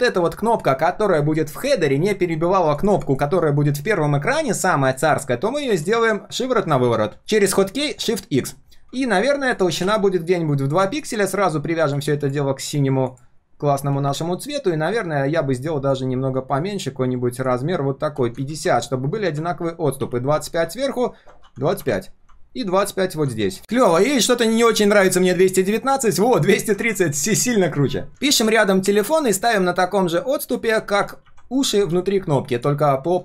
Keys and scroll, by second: 26.8 ctrl+s, 28.8 ctrl+v.